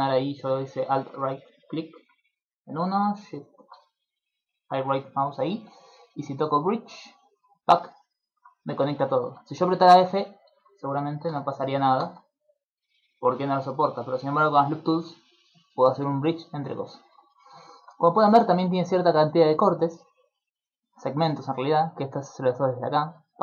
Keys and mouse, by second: 1.4 middle click, 3.1 alt+shift+right click, 5.3 middle click, 6.7 click, 7.7 middle click, 8.9 middle click, 10.5 ctrl+z, 11.3 f, 12.0 f, 13.7 middle click, 14.9 click, 16.1 middle click, 16.9 shift+middle click, 17.3 middle click, 19.5 click, 22.8 click, 23.1 click, 23.3 click.